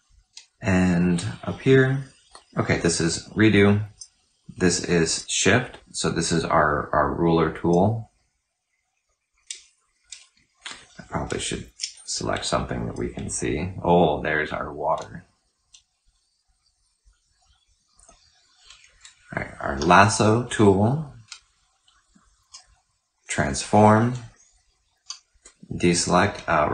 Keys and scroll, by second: 2.9 ctrl+shift+z, 11.2-12.7 typing, 14.0 typing, 19.4 ctrl+alt+f, 22.2 ctrl+t, 24.8 ctrl+d.